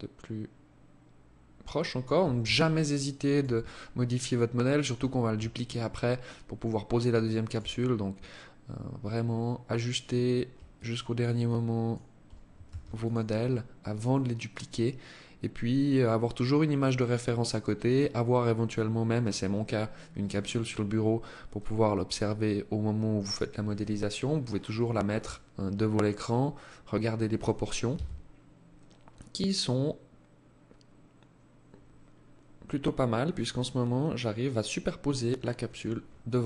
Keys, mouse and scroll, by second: 1.6 alt+click, 2.7-3.6 scroll down 9, 3.8-4.8 scroll up 6, 4.8 alt+click, 4.8 scroll up 1, 6.9-8.9 scroll up 6, 8.9 scroll up 1, 9.1 scroll down 4, 9.8 alt+click, 10.6 alt+click, 11.8 ctrl+s, 12.6-13.2 scroll down 4, 13.2-13.6 scroll up 4, 14.3-14.6 scroll down 2, 14.6 scroll up 1, 15.8 scroll down 2, 16.4-16.8 scroll up 3, 27.0 KP_1, 31.2-33.0 scroll down 3, 33.3 scroll up 2, 35.2 scroll up 3.